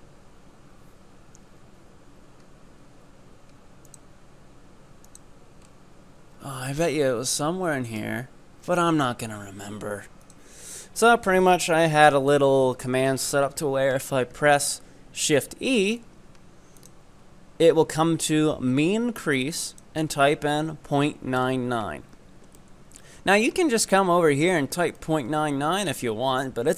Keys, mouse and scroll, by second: 14.1-16.8 scroll up 3, 16.8 click, 17.2-19.7 scroll up 2, 19.7-22.5 drag, 22.5 scroll up 1, 22.6-26.0 middle drag, 26.0-26.4 scroll down 3, 26.4-26.7 middle drag.